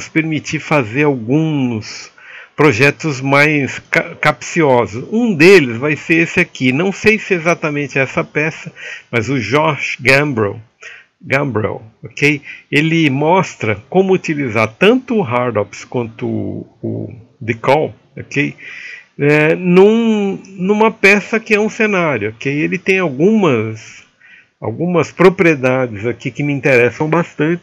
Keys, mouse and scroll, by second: 13.3 click, 14.5 middle click, 15.3 middle click, 22.9 click.